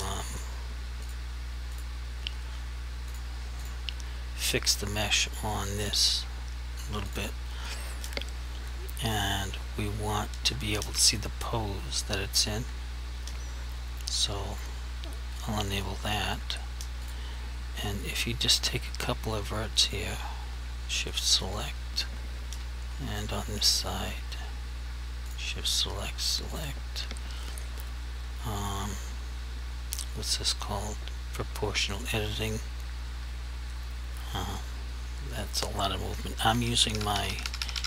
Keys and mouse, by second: 14.6 click, 20.2 click, 21.2 shift+click, 25.3 shift+click, 28.7 click, 32.5 click, 34.5 g, 36.6 Page_Down.